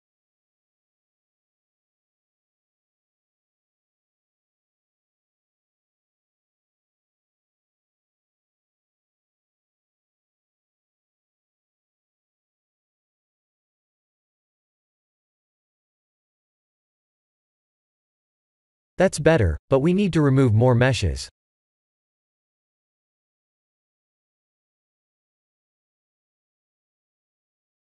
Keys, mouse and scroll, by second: 0.7 r, 2.7 ctrl+click, 4.8 g, 5.0 z, 6.0 click, 6.2 g, 7.4 click, 7.9-8.9 middle drag, 10.2 KP_0, 11.2 shift+`, 13.2 click, 14.6 click, 19.1-19.9 shift+middle drag, 21.1-22.0 shift+middle drag, 27.3-27.8 shift+middle drag.